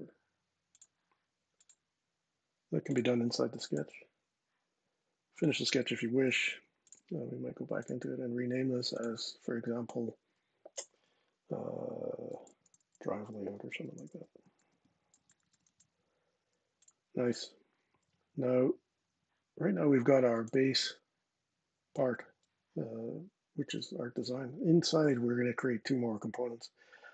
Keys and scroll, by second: 12.8-15.8 typing.